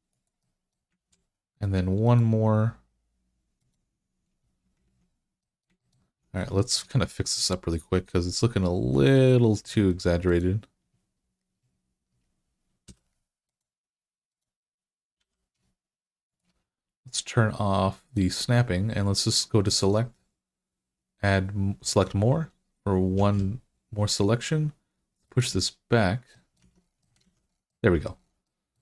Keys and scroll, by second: 0.8 ctrl+r, 4.7 alt+z, 12.7 3, 15.0 g, 23.0 g, 26.4 Tab, 27.1 alt+z.